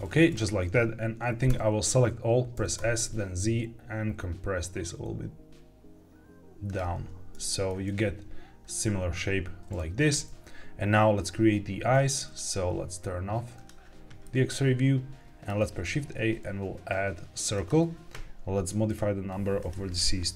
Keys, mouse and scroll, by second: 1.4 a, 2.5 s, 2.7 z, 6.6 click, 7.3 Tab, 13.5 click, 14.1-15.4 middle drag, 15.6 shift+a, 18.8 click, 19.5-20.3 drag.